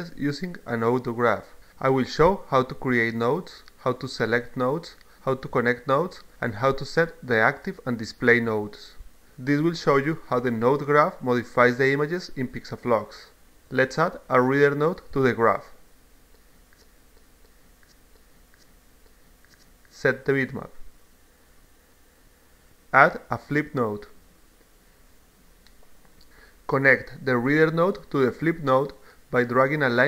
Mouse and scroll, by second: 16.3 click, 16.9-18.4 drag, 20.1 click, 21.5 click, 21.7 click, 23.4 click, 24.6-26.0 drag, 27.5-28.9 drag, 29.5 click.